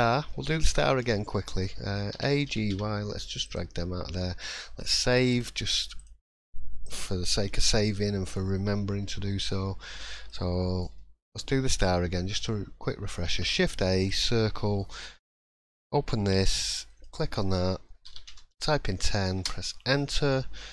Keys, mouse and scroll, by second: 0.5 shift+middle click, 1.4 middle click, 2.1 a, 2.4 g, 4.1-4.4 scroll down 2, 4.3 middle click, 5.3 click, 6.8 click, 7.4-9.0 scroll up 6, 8.0 middle click, 9.0 scroll down 1, 9.0-9.5 scroll down 2, 9.5 middle click, 13.2 shift+a, 15.4 click, 16.8 click.